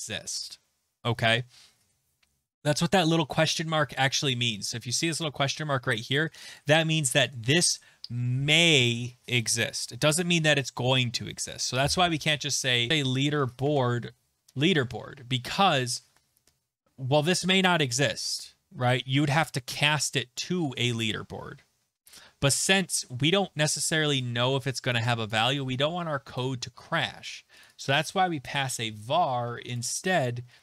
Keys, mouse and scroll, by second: 6.5 click, 12.6-13.8 typing, 12.9 click, 25.3 click, 26.4 click, 27.6 click, 27.8 click, 28.2-29.2 typing, 29.8 click.